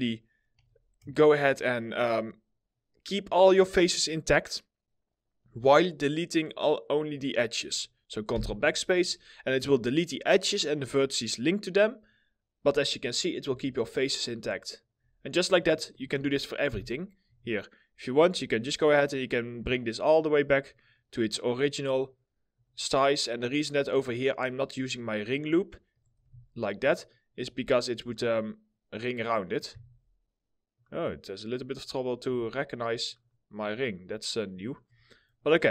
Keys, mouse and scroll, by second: 1.0 ctrl+click, 1.2 ctrl+double click, 3.6 alt+middle click, 8.0 ctrl+BackSpace, 9.3 1, 9.8 middle click, 12.6 middle click, 13.2 2, 13.9 scroll down 1, 14.4 alt+middle click, 15.4 double click, 16.3 ctrl+BackSpace, 17.9 double click, 18.3 ctrl+click, 18.4 ctrl+double click, 19.1 ctrl+click, 26.0 ctrl+z, 26.0 click, 26.5 ctrl+click, 26.6 ctrl+double click, 27.1 ctrl+z, 27.7 ctrl+click, 27.9 ctrl+double click, 28.7 ctrl+click, 28.8 ctrl+double click, 29.5 ctrl+z, 30.4 ctrl+click, 30.6 ctrl+double click, 31.3 ctrl+click, 31.4 ctrl+double click, 32.0 ctrl+z, 32.8 ctrl+click, 32.8 ctrl+double click, 33.5 ctrl+click, 34.3 ctrl+double click, 35.0 middle click.